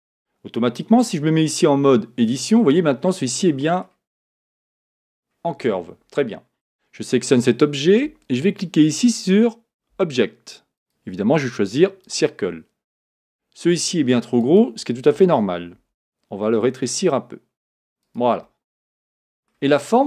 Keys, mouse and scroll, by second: 0.9 Tab, 2.6-3.9 middle drag, 3.9 scroll up 1, 4.1-4.6 scroll down 4, 4.6-5.6 middle drag, 5.6 Tab, 6.6 click, 10.8-14.6 drag, 15.8 s, 18.4-19.8 middle drag, 19.8-20.0 scroll up 6.